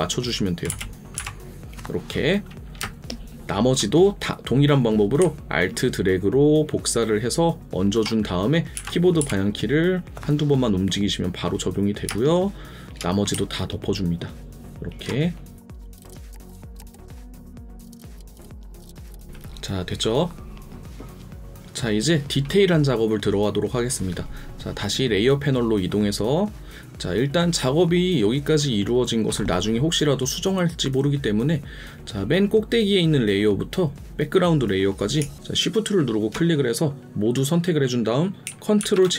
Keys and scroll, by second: 8.7 alt+Up, 9.2 alt+Down, 16.7 alt+space, 19.0 ctrl+KP_Subtract, 35.2 ctrl+0, 38.8 ctrl+j.